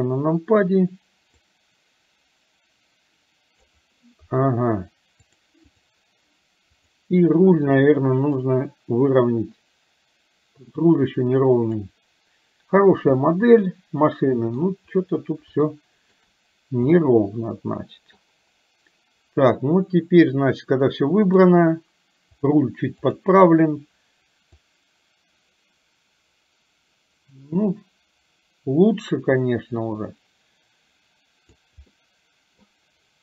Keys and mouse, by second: 1.6-3.9 drag, 5.3 click, 6.7 click, 8.4 click, 8.8-11.9 drag, 13.3-14.7 middle drag, 15.7 shift+middle click, 17.1-18.2 middle drag, 21.3 click, 22.4-23.4 drag, 24.7-31.8 drag, 31.9 middle click.